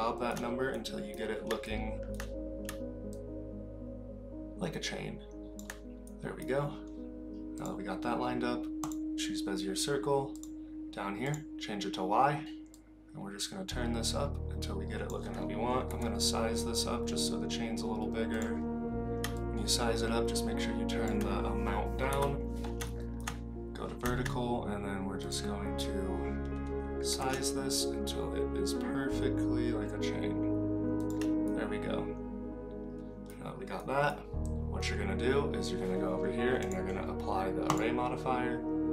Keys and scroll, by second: 15.9 s, 22.1 KP_7, 27.1 s.